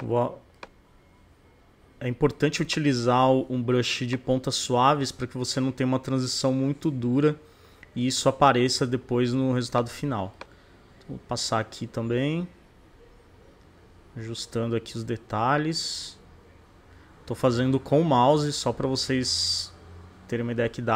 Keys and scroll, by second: 2.8 [.